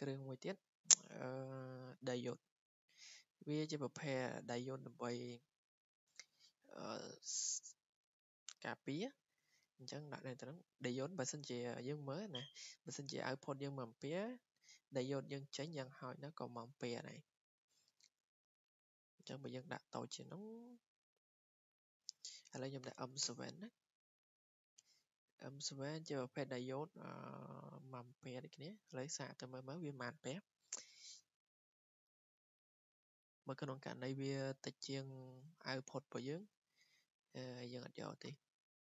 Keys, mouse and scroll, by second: 2.9 click, 4.9 click, 16.9 click, 17.9 click, 20.0 click, 22.6 typing, 23.2 Return, 24.8 click, 25.2 click, 28.9 click, 37.7 click, 38.2 click.